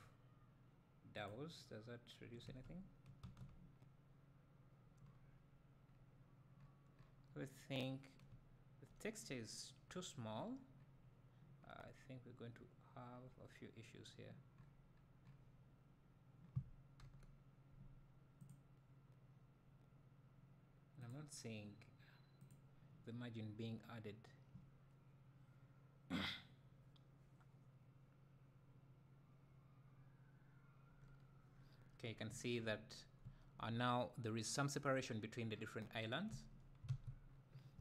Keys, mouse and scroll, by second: 2.5 Tab, 2.5-6.5 right drag, 3.4 Tab, 11.6-11.9 scroll up 2, 12.2-19.6 right drag, 13.7 scroll down 1, 30.3 right click, 36.9 alt+a, 36.9-37.8 right drag, 37.7 `.